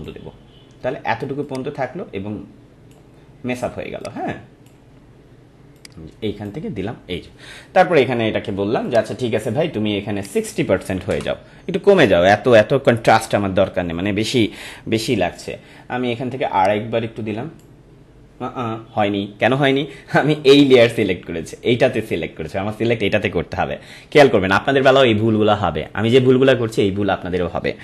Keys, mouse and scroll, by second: 16.6-20.1 drag, 23.6-27.8 drag.